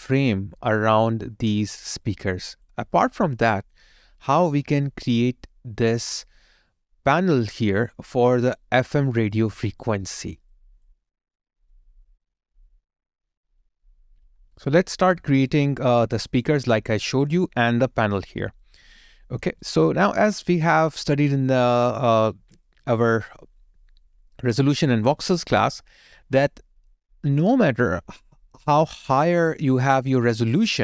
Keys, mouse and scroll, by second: 1.8 alt+right click, 2.3 alt+click, 2.9 alt+right click, 3.3 alt+middle click, 4.0 alt+click, 8.2 alt+right click, 8.7 alt+click, 9.3 alt+right click, 10.0 alt+middle click, 10.5 alt+click, 11.0 alt+right click, 11.8 alt+click, 14.6 alt+right click, 15.9 alt+click, 16.7 alt+right click, 19.6 alt+right click, 19.9 alt+click, 20.4 alt+right click, 21.0 alt+middle click, 21.5 alt+right click, 22.7 alt+middle click, 30.4 alt+click.